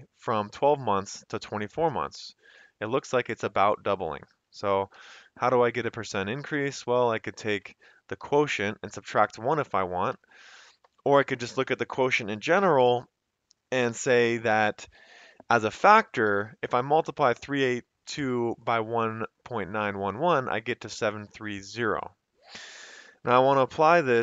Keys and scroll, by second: 5.0 =, 8.2 /, 10.1 Return, 10.9 Up, 24.1 ctrl+c.